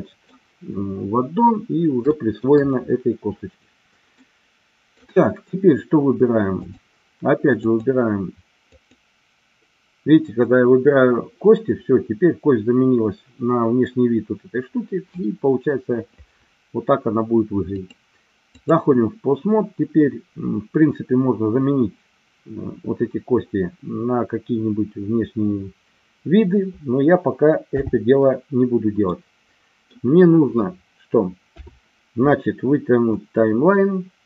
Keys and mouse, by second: 2.2 shift+middle click, 4.2-5.2 middle drag, 6.6 click, 7.7 click, 8.7 click, 17.8-18.7 drag, 29.0 middle click, 31.4 KP_7, 33.3-34.2 drag.